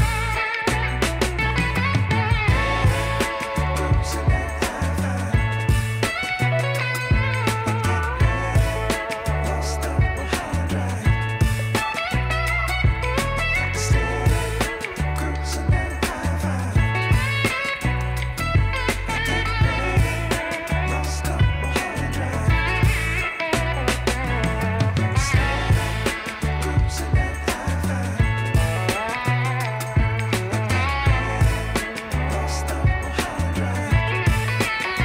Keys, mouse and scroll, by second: 5.7 alt+scroll up 1, 6.8 alt+middle click, 7.7 alt+scroll up 1, 8.0 alt+middle click, 17.4 alt+middle click.